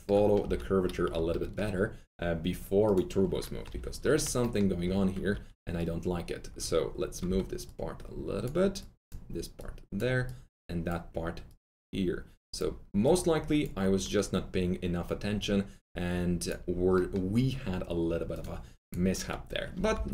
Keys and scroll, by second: 0.4-1.1 typing, 5.3 typing, 7.2 w, 19.4-20.1 typing.